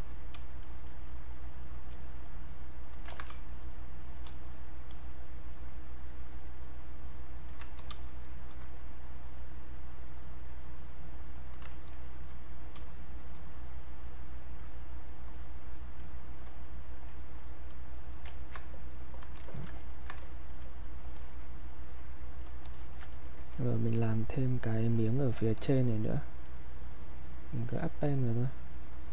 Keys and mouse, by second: 0.4 space, 0.7 click, 0.9 space, 2.2 click, 3.1 ctrl+z, 3.3 space, 3.6 click, 3.8 space, 4.7 click, 6.8 click, 8.0 space, 8.3 click, 8.5 space, 8.7-10.6 drag, 10.8 click, 12.8 space, 13.2 click, 13.3 space, 13.6-17.7 drag, 18.9 click, 19.8 ctrl+right click, 20.2 alt+click, 21.2 alt+click, 23.1 ctrl+alt+right click, 23.5-29.1 ctrl+drag.